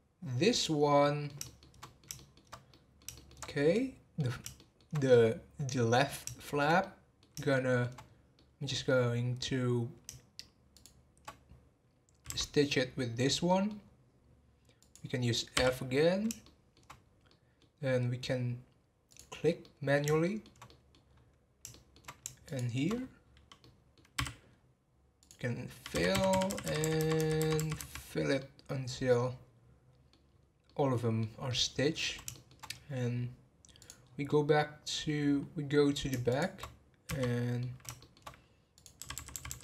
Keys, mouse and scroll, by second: 0.5 click, 1.0-3.4 middle drag, 3.4 scroll up 3, 3.7 middle click, 4.2 scroll down 2, 4.5-8.0 shift+middle drag, 8.0 scroll up 3, 8.3-10.7 middle drag, 10.7 shift+click, 12.2 f, 12.9-13.3 scroll down 7, 13.5 middle click, 13.8-14.3 scroll up 3, 14.8 click, 16.4 shift+middle click, 17.0 scroll up 1, 17.3 middle click, 17.6-18.9 scroll up 2, 19.0 click, 19.6-21.1 middle drag, 21.1 scroll up 2, 21.6 scroll up 1, 21.7 shift+middle click, 22.4 shift+click, 22.9-23.3 scroll down 9, 23.6 middle click, 24.2 f, 24.5 scroll up 3, 25.2 click, 26.6 f, 27.0 f, 28.3-30.3 middle drag, 30.3-30.6 scroll down 1, 30.6-32.6 middle drag, 32.6-33.7 scroll up 2, 33.7 scroll up 2, 33.8 click, 34.0 scroll down 1, 34.2-35.4 middle drag, 35.4 scroll up 1, 36.3 shift+click, 37.1-39.6 f, 37.2-38.7 middle drag, 38.7 click.